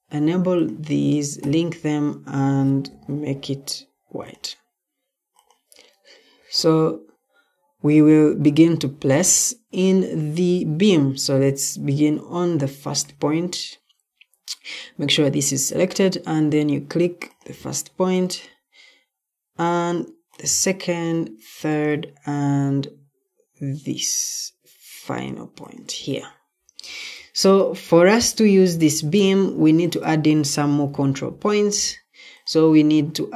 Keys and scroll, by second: 2.8 p, 28.2 Escape.